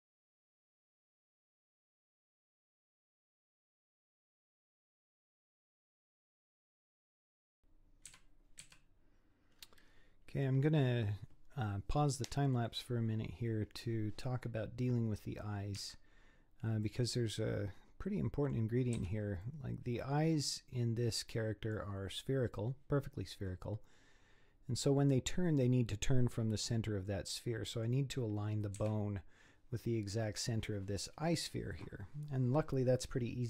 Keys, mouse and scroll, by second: 0.0-7.0 typing, 0.1 scroll up 3, 0.3 middle click, 0.4 click, 0.6 scroll up 1, 0.8 middle click, 1.0 middle click, 1.3 click, 1.8 click, 1.9 middle click, 2.5 scroll down 5, 2.5 middle click, 2.7 middle click, 2.8 scroll up 6, 2.9 middle click, 3.0 scroll down 3, 3.0 scroll up 5, 3.7 click, 3.9 middle click, 4.1 click, 4.2 middle click, 4.4 scroll down 3, 4.5 scroll up 1, 4.5 click, 4.7 middle click, 5.1 middle click, 5.2 scroll up 5, 5.4 middle click, 5.6 middle click, 5.8 scroll down 7, 5.8 middle click, 6.0 scroll up 1, 6.1 click, 6.2 middle click, 6.3-6.9 scroll down 8, 6.7 middle click, 6.9 scroll up 2, 7.1 scroll down 1, 7.3 scroll up 5, 7.5 middle click, 8.1 z, 8.6 z, 9.6-12.7 scroll up 7, 15.8 Tab, 16.9 click, 17.3-19.0 middle drag, 19.0 z, 19.4-22.5 middle drag, 26.5-28.8 middle drag, 28.8 z.